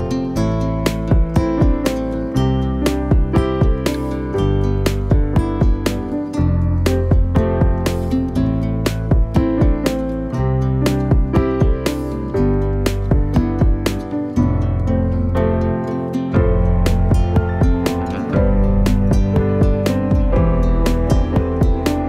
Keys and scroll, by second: 6.0-7.1 typing, 10.0 F10, 11.7 space, 20.5 F10.